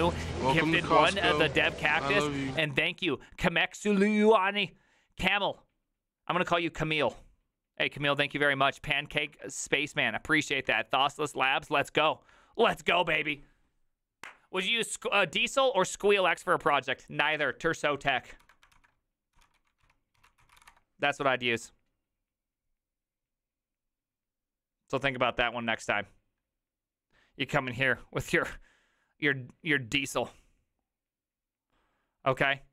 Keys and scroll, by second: 18.8 alt+h, 18.8 ctrl+t, 19.1-21.2 typing.